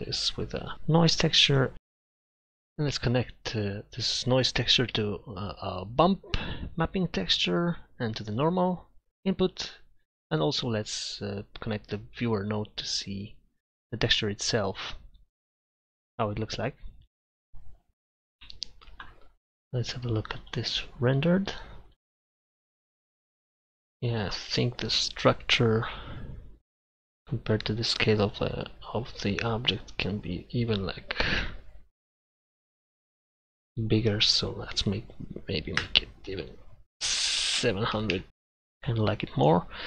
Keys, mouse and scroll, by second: 1.8 scroll up 1, 2.3 click, 10.0 click, 37.4 7.